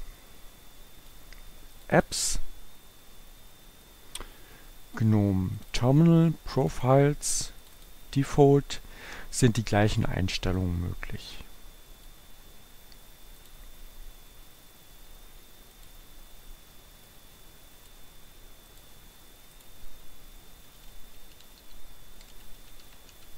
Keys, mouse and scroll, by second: 0.0-1.7 drag, 1.9 click, 4.0-5.5 drag, 5.7 click, 6.6 click, 7.7 click, 10.6-12.5 drag, 13.4 click, 15.7 click, 17.2-18.3 drag, 18.7 click, 19.7 click, 20.2-23.3 typing.